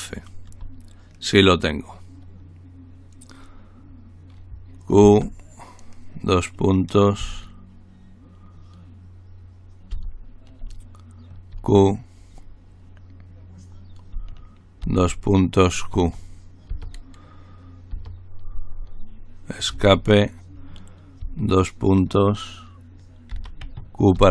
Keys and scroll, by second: 4.8-5.5 typing, 9.9 typing, 11.5 typing, 14.8 typing, 15.9-16.7 typing, 17.9 typing, 19.7-21.8 typing, 23.3-24.3 typing.